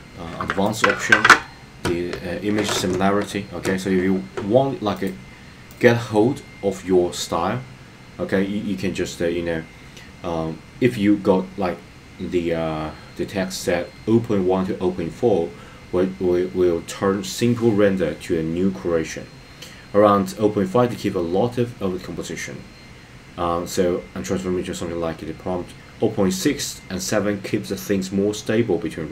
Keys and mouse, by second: 0.8 click, 5.0 click.